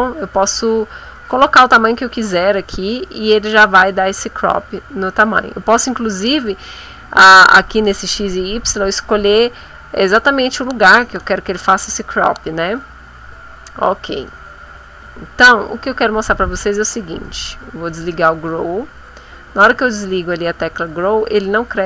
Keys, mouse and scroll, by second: 0.3 click, 1.2 click, 3.7-5.4 drag, 14.2-16.7 drag, 17.2 click, 18.0-20.1 drag, 20.8-21.8 drag.